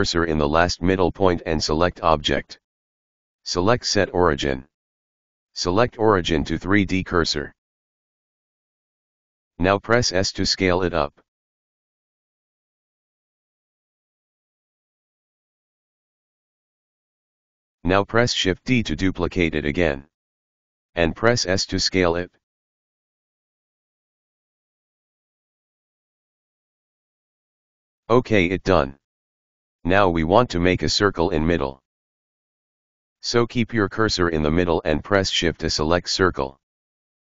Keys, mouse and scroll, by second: 1.5-4.6 drag, 8.7-10.8 middle drag, 10.9 s, 14.7-17.6 middle drag, 17.6 shift+d, 24.1 s, 28.2-30.1 middle drag, 30.1-30.7 scroll down 2, 30.7 right click, 31.1 scroll down 1, 31.1-31.7 middle drag, 33.0 KP_Decimal, 33.9-34.8 scroll up 5.